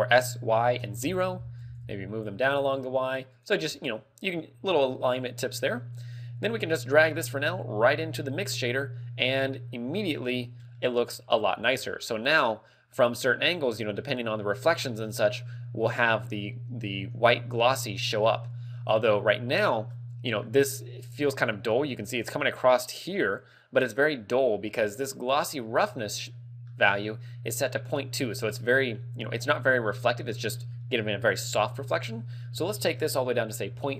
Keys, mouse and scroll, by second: 1.7 g, 3.5 click, 3.7 a, 4.7-5.2 scroll up 3, 5.4 middle click, 7.2 click, 10.8 middle click, 12.2-12.5 scroll up 3, 12.9 middle click, 19.9 middle click, 25.5 scroll up 5, 25.9 middle click, 26.3-26.7 scroll up 2, 26.7 middle click, 32.7 ctrl+click.